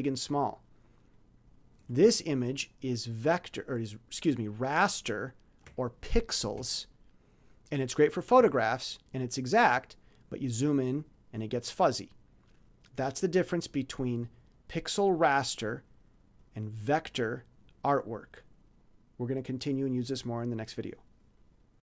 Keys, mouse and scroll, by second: 2.1-2.6 ctrl+scroll down 2, 2.7-3.1 ctrl+scroll down 2, 3.4 ctrl+scroll down 2, 4.6 ctrl+scroll down 2, 5.3 ctrl+scroll down 2, 6.9-8.0 shift+scroll down 3, 8.9-9.2 ctrl+scroll up 2, 9.5 ctrl+scroll up 2, 10.1-10.8 ctrl+scroll up 4, 11.0-11.6 ctrl+scroll down 4, 12.1-12.7 ctrl+scroll down 4, 16.4 click.